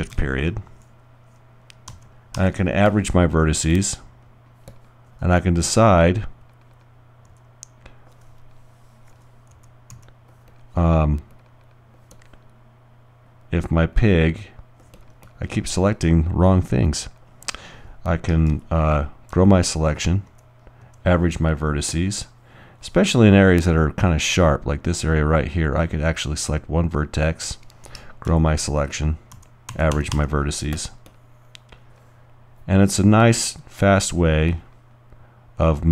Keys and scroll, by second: 0.1 shift+., 1.9 shift+g, 2.4 g, 7.3 alt+f, 9.5 alt+g, 10.0 alt+g, 18.5-21.3 typing, 28.4-30.4 typing.